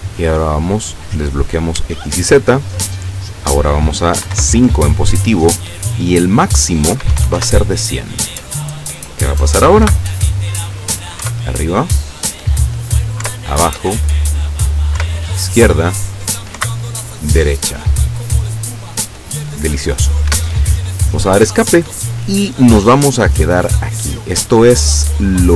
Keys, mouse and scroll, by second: 1.5 click, 2.1 click, 3.2 click, 4.2 KP_5, 4.4 KP_Enter, 5.9 click, 7.0 KP_1, 7.2 KP_0, 7.4 KP_Enter, 9.9 p, 11.3 Up, 13.3 Down, 15.0 Left, 16.7 Right, 20.4 Escape, 24.3 click.